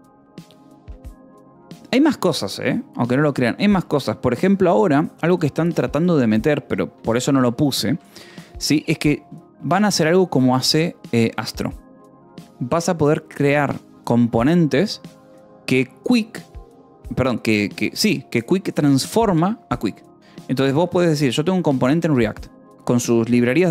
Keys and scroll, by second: 1.2 alt+Tab, 7.4 BackSpace, 7.9 Escape, 8.7 ctrl+s.